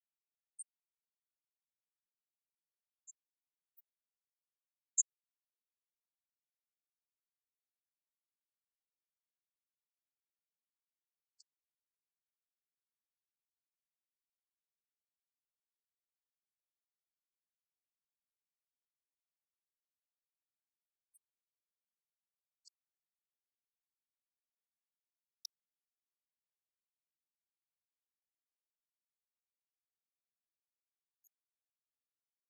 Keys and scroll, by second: 31.1 Down.